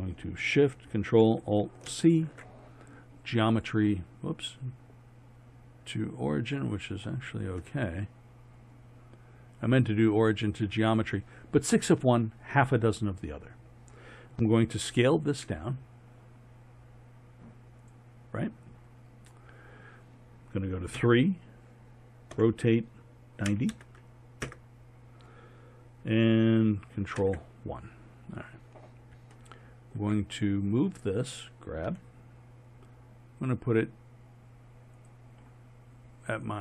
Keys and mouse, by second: 1.9 ctrl+alt+shift+c, 5.9-8.0 middle drag, 8.3 middle click, 8.6-9.6 middle drag, 15.4 s, 18.8 click, 21.0 KP_3, 22.4 r, 27.2 ctrl+KP_1, 28.3-29.8 middle drag, 31.9 g.